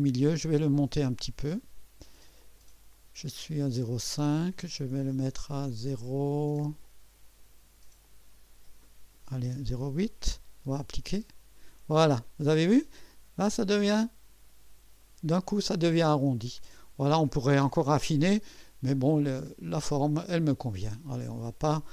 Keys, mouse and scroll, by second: 1.6 click, 2.4 click, 6.8 click, 7.4 click, 8.0 click, 9.4-20.0 typing, 11.0 click, 12.2 scroll up 1, 12.9-15.0 drag, 15.9-17.5 drag, 18.5 scroll down 1, 19.0-20.5 drag.